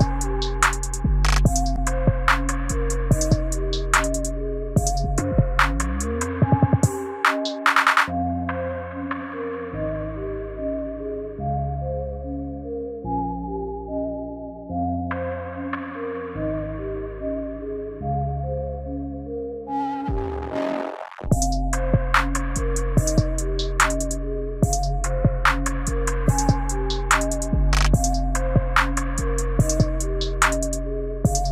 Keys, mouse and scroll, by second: 8.7 space, 9.3 right click.